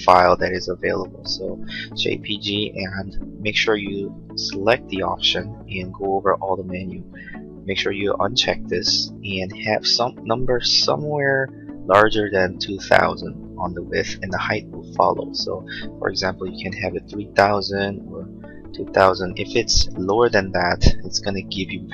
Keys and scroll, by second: 16.0-16.8 typing, 19.3-20.2 typing.